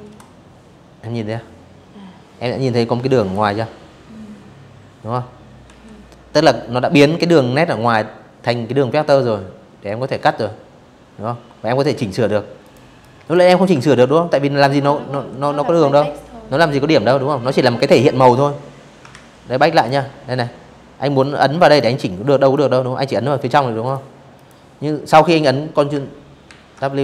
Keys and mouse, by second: 3.3 v, 9.6 a, 10.3 click, 10.7 click, 11.5 ctrl+z, 12.8 v, 16.8 ctrl+z, 17.4 click, 18.9 click, 19.2 click, 19.9 click, 21.5 click, 22.0 click, 24.2 ctrl+w.